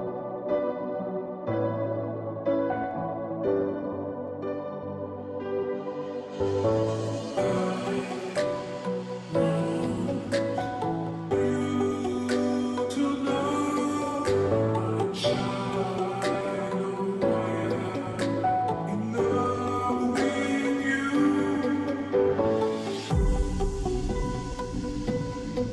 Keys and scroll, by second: 0.0-25.7 typing, 13.4 ctrl+t.